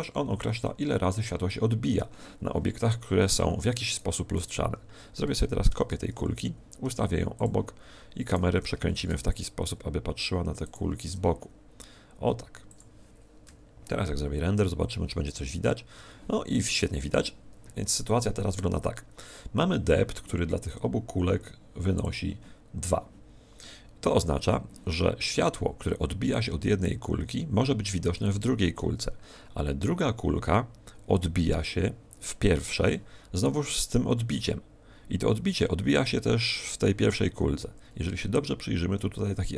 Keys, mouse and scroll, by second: 3.8 right click, 5.6 shift+d, 7.5 click, 8.2 right click, 8.9 shift+f, 10.6 click, 12.6 g.